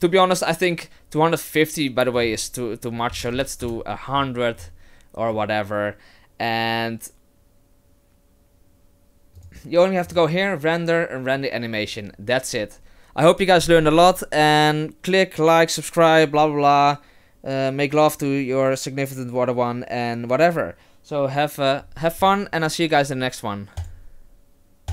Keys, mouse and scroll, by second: 2.2 click, 3.3 KP_0, 5.4 click, 9.3 click, 10.1 click.